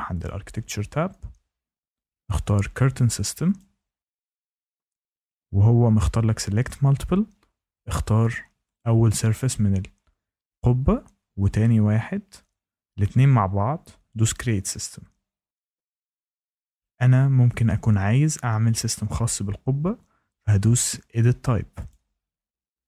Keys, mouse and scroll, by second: 0.2 click, 3.5 click, 8.7 click, 11.4 click, 14.3 click, 21.8 click.